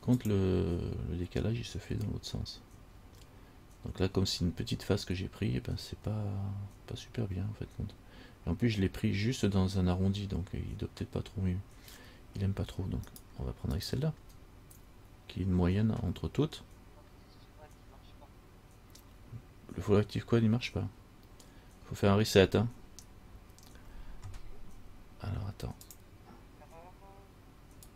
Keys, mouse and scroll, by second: 4.2-6.1 scroll up 1, 6.1-6.9 scroll up 1, 13.3 shift+right click, 13.9 shift+right click.